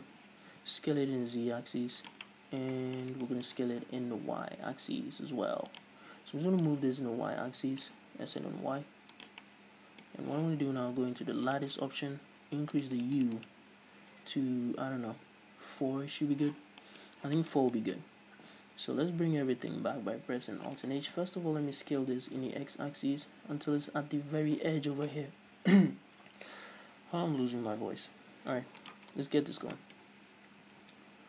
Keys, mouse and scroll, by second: 0.1-0.6 scroll up 1, 0.6 s, 2.3 click, 2.4-6.0 middle drag, 2.9 scroll down 1, 3.9 s, 6.0 click, 6.1-6.8 scroll up 1, 6.8-9.4 drag, 8.3 s, 9.6-11.7 middle drag, 11.7-16.8 drag, 16.8 scroll down 1, 17.0-29.1 middle drag, 17.3 scroll up 1, 21.3 KP_1, 22.0-22.3 scroll up 1, 22.3 s, 29.1 shift+click, 29.9-31.2 shift+middle drag, 30.3-30.7 scroll up 1, 30.7 s.